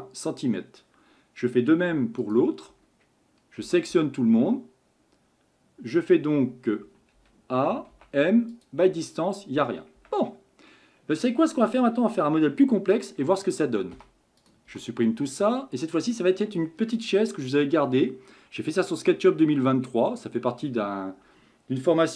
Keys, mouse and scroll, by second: 1.9 Tab, 2.2 click, 2.7 Tab, 3.6 a, 3.9 a, 6.8 a, 7.1 a, 7.9 m, 10.0 Tab, 10.7-11.5 middle drag, 11.5-12.9 scroll down 2, 12.9 click, 13.9 Delete, 14.4 click, 14.7 Delete, 15.4-18.4 middle drag.